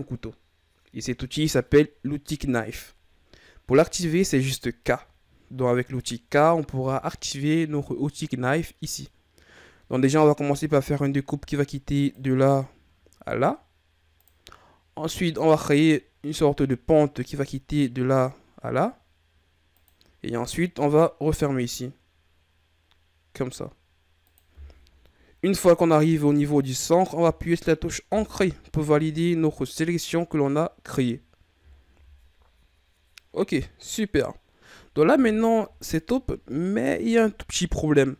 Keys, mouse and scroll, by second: 6.6 k, 29.6-30.7 scroll up 2, 31.6-33.3 shift+scroll down 4, 34.6-37.7 scroll down 2.